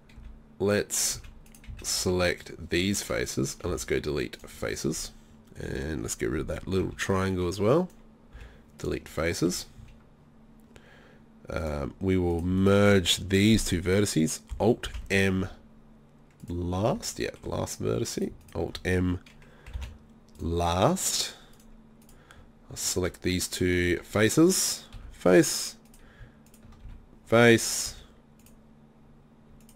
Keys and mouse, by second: 0.2 b, 1.7 z, 2.1 b, 3.8 Delete, 6.9 b, 8.4 Delete, 9.8 z, 14.9 alt+m, 18.2-19.8 right drag, 19.8 alt+m, 21.6 right click, 23.3-25.0 middle drag, 25.0 f, 26.9 f, 27.9 z.